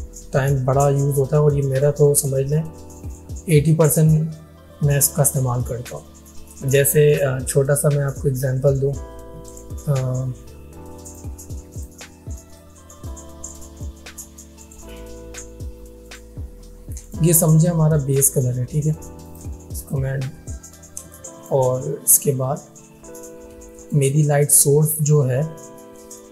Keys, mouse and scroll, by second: 9.5 right click, 11.1 click, 19.3 click, 20.7 alt+scroll up 1, 21.1 space, 21.2-21.8 click, 21.6 space, 22.0 alt+scroll down 1, 23.7 space, 23.8 click, 24.9 right click.